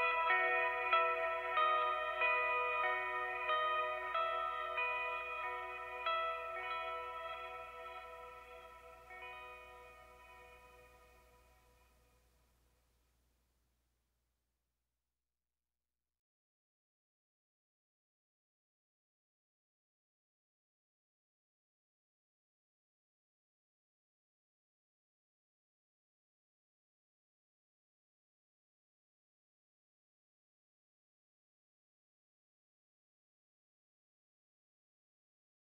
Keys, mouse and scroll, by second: 0.9 click, 2.3 click, 5.1 click, 6.4 click, 7.5 click, 9.6 click, 11.5-13.8 ctrl+drag, 14.1 ctrl+click, 17.5 click, 18.7-20.9 super+drag, 21.5 click, 22.7 click, 24.2 click, 25.3 click, 26.4 Return, 26.8-30.0 typing, 33.1 alt+Tab, 34.1 alt+click, 35.6 click.